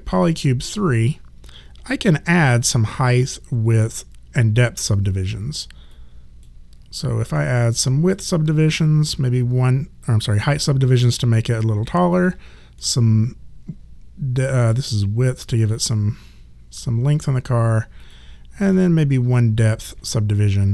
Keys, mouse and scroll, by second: 5.9 click, 7.4 middle click, 12.1 click, 12.8 middle click, 18.0 click, 18.7 middle click.